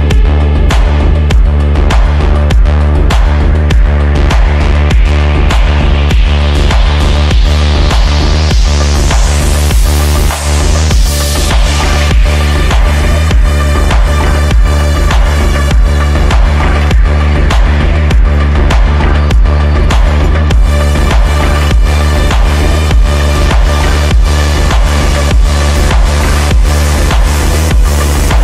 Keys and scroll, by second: 18.1 Delete, 24.3 shift+F2, 25.1 F9, 27.4 F9, 27.8 F3, 28.2 Escape.